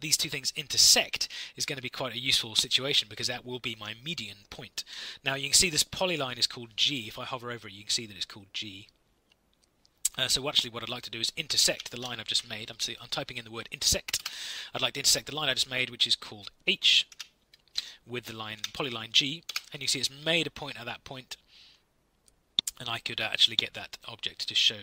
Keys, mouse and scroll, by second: 11.2-12.7 typing, 14.1 Return, 17.1 h, 17.6 Tab, 18.5 g, 19.4 Return.